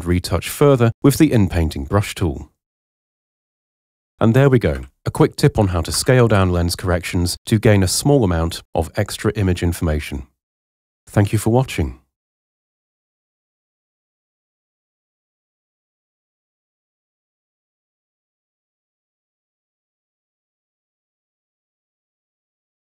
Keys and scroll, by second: 4.7 h, 5.9 super+0.